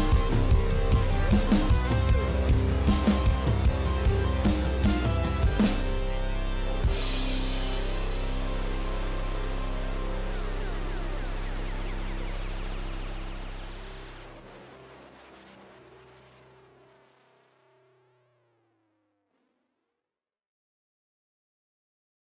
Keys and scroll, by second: 0.0 ctrl+s, 3.6 ctrl+s.